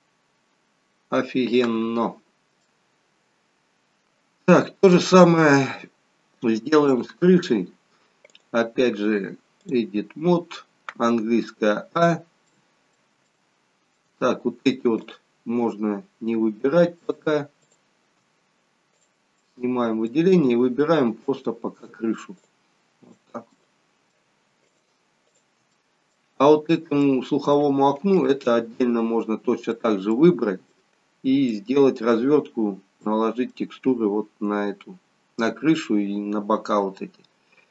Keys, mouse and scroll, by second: 2.7 shift+middle click, 4.6-5.3 scroll up 1, 5.3-5.7 scroll up 1, 6.9 click, 8.3 click, 11.2 a, 12.5 middle click, 13.3 shift+middle click, 15.5 shift+click, 16.8 middle click, 17.7 shift+click, 19.0 click, 19.4 middle click, 21.3 click, 22.3 shift+click, 23.1 shift+click, 23.6 middle click, 24.7 shift+click, 25.7 middle click, 27.1 middle click, 28.2 shift+click, 28.8 middle click, 30.1 middle click, 31.6 middle click, 33.1 middle click.